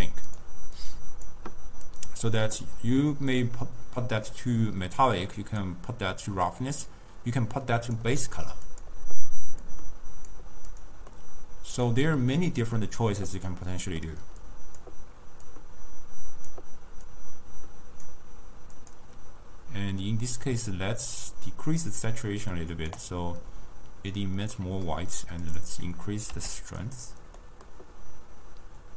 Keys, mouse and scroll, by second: 0.0 click, 0.9 click, 2.0 click, 3.4 drag, 8.8 click, 10.8 click, 11.2-14.5 middle drag, 14.5 click, 15.5-17.3 drag, 18.8 click, 24.6 scroll up 1, 24.7-25.3 scroll down 2, 24.8 middle click, 25.5-27.1 drag, 27.5-28.9 middle drag.